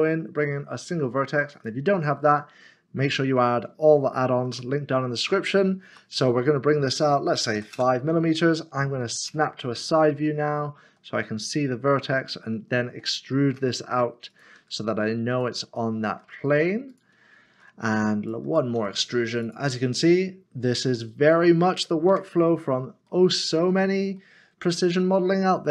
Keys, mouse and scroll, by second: 1.5 click, 2.3 click, 2.5 middle click, 4.5 m, 5.9 typing, 7.5 typing, 7.7 Return, 10.0 typing, 10.3 shift+middle click, 11.1-11.7 scroll down 1, 14.3 click, 15.3 e, 16.9 e, 18.3 click, 18.8 e, 19.9 click, 20.0 middle click, 22.1 Tab, 22.6 scroll down 1, 24.1 shift+middle click.